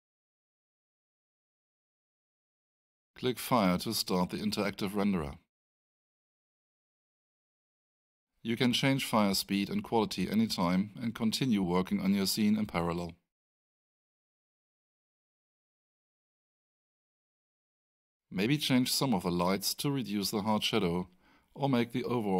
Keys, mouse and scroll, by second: 0.3 click, 4.4 click, 17.7 click, 19.8 click, 21.4 2.